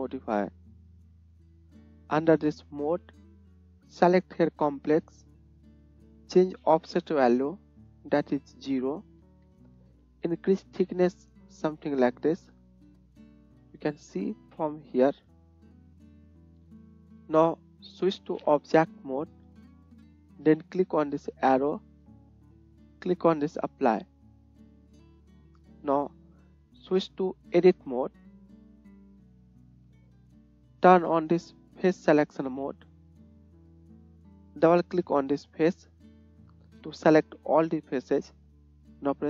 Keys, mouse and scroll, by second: 34.9 middle click, 35.1 alt+click, 35.2 middle click, 36.4-39.2 middle drag.